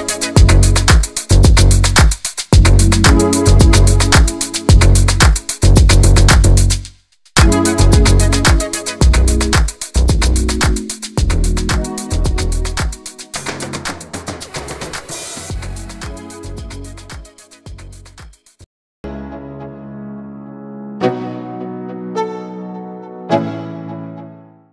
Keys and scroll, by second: 1.9 space, 12.3 space, 12.5 space, 14.1 space, 15.6 space, 17.1 space.